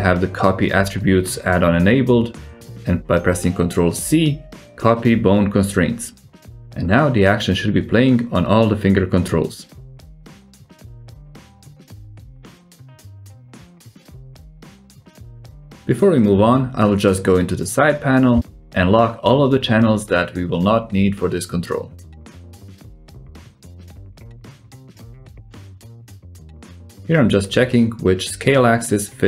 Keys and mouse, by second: 2.1 ctrl+c, 6.5 click, 7.1-7.9 middle drag, 7.9 click, 9.1 alt+z, 9.4-9.9 drag, 10.1 g, 17.6-18.3 drag, 18.3 middle click, 18.7 click, 19.7 n, 20.8 click, 23.0 click, 24.6 click, 25.0 click, 27.5 click, 27.9 click, 28.7 s.